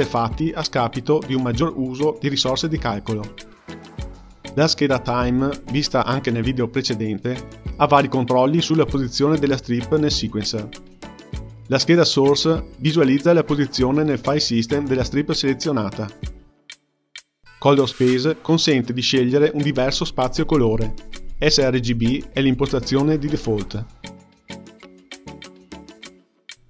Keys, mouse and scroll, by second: 0.0-1.4 scroll up 6, 1.4 scroll up 3, 2.5-8.2 drag, 8.2-8.7 scroll down 1, 8.8-17.3 drag, 17.3 space, 17.6 space, 17.9-19.2 drag, 19.2 ctrl+r, 19.7 click, 20.5 ctrl+r, 21.3-22.4 drag, 22.4 ctrl+r, 23.0-23.8 drag, 23.8 ctrl+r.